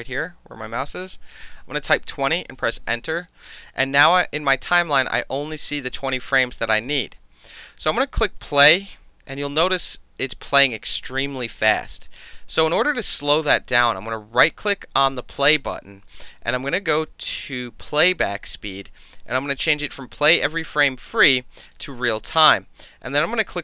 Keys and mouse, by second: 1.5 KP_2, 1.6 KP_0, 2.3 KP_Enter, 4.7-7.1 drag, 8.4 click, 11.5 click, 15.5 click, 21.7 click, 23.5 click.